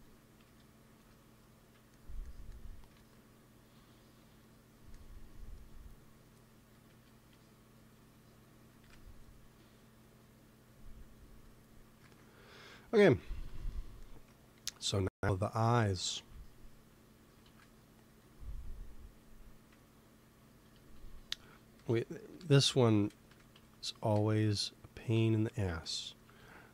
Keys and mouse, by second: 0.4 KP_3, 0.9 KP_1, 1.4-3.4 middle drag, 2.8 ctrl+s, 6.8 KP_3, 8.7 KP_1, 10.9 click, 11.5-12.8 drag, 11.9 ctrl+s, 16.0 shift+s, 17.3 shift+a, 20.6 z, 21.7 r, 22.6-24.4 drag, 23.2 Tab, 23.5 z, 24.0 g, 25.1-26.7 typing.